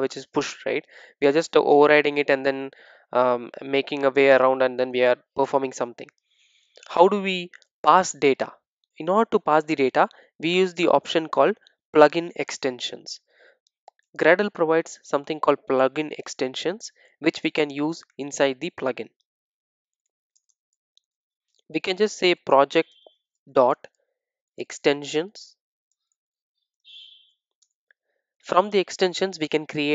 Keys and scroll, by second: 27.6 Return.